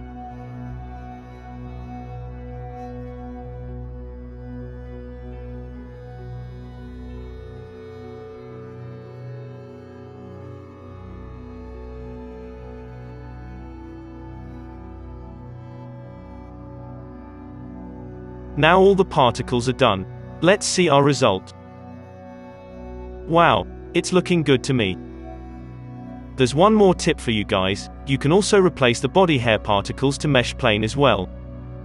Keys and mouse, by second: 0.0 n, 0.3 f, 2.2 f, 2.9 ctrl+z, 4.6-6.0 drag, 4.6 alt+a, 5.1 f, 6.3-9.5 drag, 6.3 f, 7.5 f, 9.4 f, 9.5 middle click, 9.5 f, 10.3 ctrl+z, 10.3 ctrl+z, 10.4 f, 11.4 n, 11.9-14.9 middle drag, 13.4 n, 13.9-15.9 drag, 14.2 ctrl+z, 14.9 alt+a, 15.1 z, 15.9-18.1 middle drag, 17.2 KP_5, 17.4 z, 18.1-19.9 drag, 19.3 alt+a, 19.9-31.8 middle drag, 19.9 KP_3.